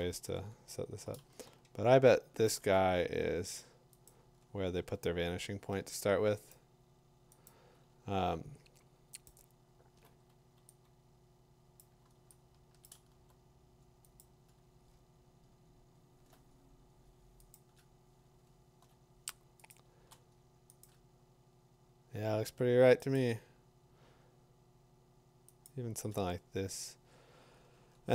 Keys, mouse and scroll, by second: 0.9 middle click, 0.9 scroll down 3, 1.0 middle click, 4.1 click, 4.8 scroll down 5, 6.3 middle click, 6.5 click, 7.5 click, 7.9 middle click, 9.3 click, 9.7 middle click, 9.8 middle click, 10.4 middle click, 11.8 click, 12.9 click, 14.0 b, 14.2 click, 14.9 scroll down 1, 15.4-16.0 scroll down 7, 17.5 middle click, 17.5 click, 20.8 click, 24.9 click, 25.7 click.